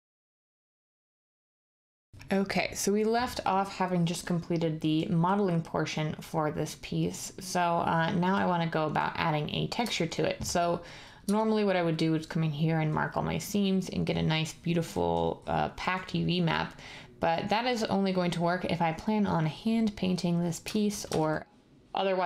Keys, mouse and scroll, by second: 11.2 Tab, 21.0 Tab.